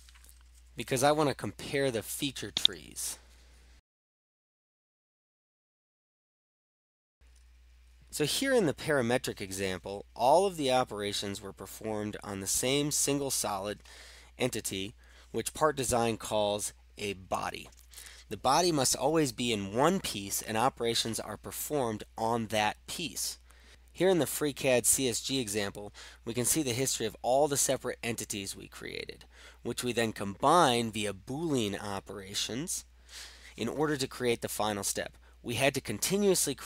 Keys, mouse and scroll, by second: 2.7 click, 4.0 click, 4.1 click, 4.2 click, 4.6 click, 4.8-5.3 click, 5.0 click, 5.2 click, 5.5 click, 5.9 click, 6.1 click, 6.3 click.